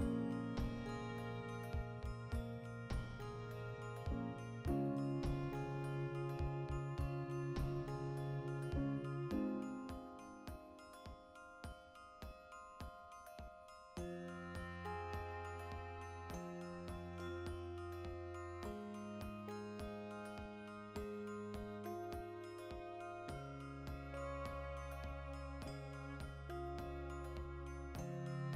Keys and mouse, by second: 1.6 ctrl+z, 3.8 2, 4.0 alt+right click, 4.4 ctrl+b, 7.1 click, 7.4 right click, 8.2 f, 8.5 right click, 8.6 f, 8.8-9.8 middle drag, 9.0 f, 9.8 right click, 10.2 f, 10.7-14.9 middle drag, 12.4 ctrl+r, 14.0 right click, 14.6 f, 14.9 right click, 15.0-16.2 middle drag, 15.0 f, 15.5 ctrl+r, 16.2 right click, 16.8 f, 17.6 right click, 17.7 f, 18.2-23.6 middle drag, 21.6 alt+q, 22.8 Tab, 22.9 b, 23.6 click, 24.4 click, 25.5 ctrl+middle click, 25.8 ctrl+z, 27.0 Tab, 27.5 middle click, 27.5 b, 28.0 click.